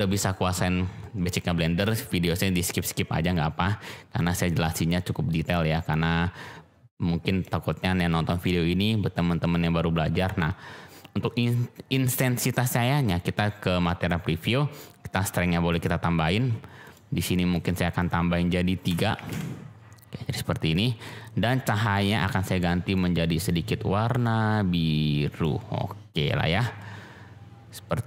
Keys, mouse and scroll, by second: 15.7 click, 16.8 click, 17.9-20.5 drag, 21.8 click.